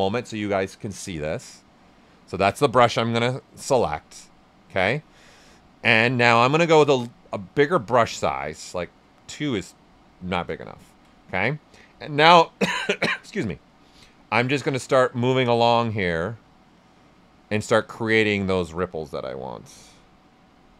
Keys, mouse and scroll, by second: 4.3 click, 5.4 right click, 7.6 s, 9.3-10.6 drag, 10.6 ctrl+right click, 11.1 right click, 14.1-17.7 drag, 17.7 right click, 18.8-20.7 drag.